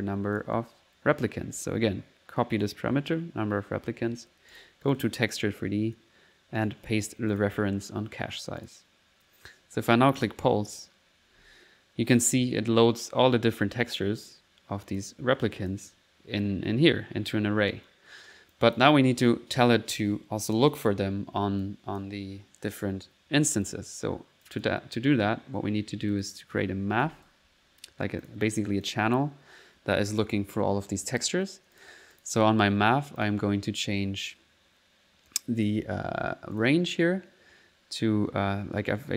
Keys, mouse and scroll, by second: 0.4 click, 1.6 right click, 2.6 click, 3.1 click, 3.7 middle click, 4.5 click, 6.6 right click, 7.3 click, 8.6 click, 10.2 click, 10.7 click, 11.4 1, 12.1 middle click, 14.9 click, 15.6 click, 15.9 middle click, 18.6 click, 21.6 click, 25.4 middle click, 26.1 middle click, 26.8-27.5 typing, 28.3 click, 28.9 click, 31.8 click, 35.6 click, 37.6 middle click.